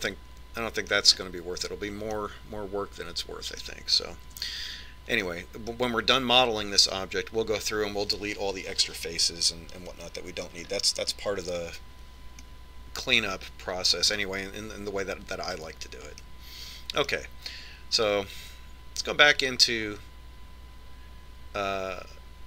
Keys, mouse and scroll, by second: 0.2-1.9 middle drag, 2.7-5.5 middle drag, 6.1 z, 7.0-9.0 middle drag, 10.9-12.5 middle drag, 12.5-14.3 scroll down 1, 14.3-15.8 middle drag, 15.9-17.6 middle drag, 18.0-19.8 middle drag, 20.3 Tab.